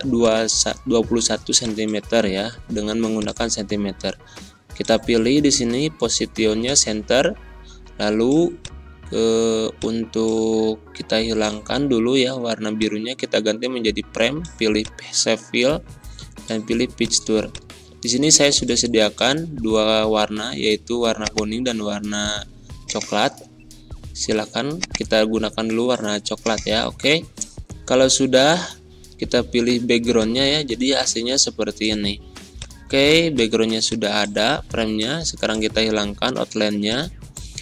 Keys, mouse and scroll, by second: 13.8 click, 21.2 click, 24.2 click, 30.1 click.